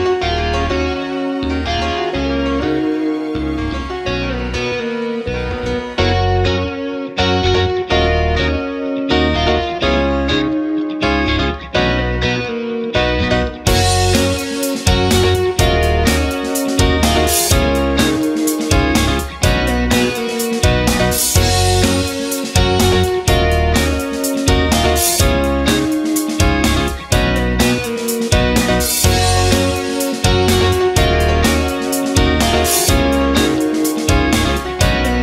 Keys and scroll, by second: 0.0 ctrl+z, 0.9 space.